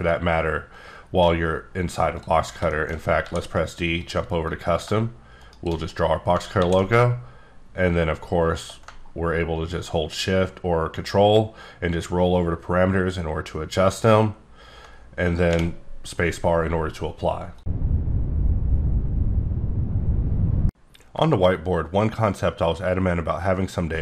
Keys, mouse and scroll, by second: 0.3 ctrl+scroll down 4, 2.2 click, 2.4 scroll down 1, 2.7 shift+middle click, 2.9 shift+scroll up 1, 3.2 d, 4.0 click, 4.5 click, 5.4 shift+right click, 6.6 ctrl+d, 7.7-8.4 shift+scroll down 10, 9.0-9.8 ctrl+scroll down 7, 10.4-10.9 ctrl+scroll down 8, 11.5-11.9 ctrl+scroll up 11, 11.9 ctrl+scroll down 7, 12.2 ctrl+scroll, 12.5 ctrl+scroll down 1, 12.9-13.4 ctrl+scroll up 1, 13.4-13.9 ctrl+scroll up 8, 14.2-14.9 ctrl+scroll down 2.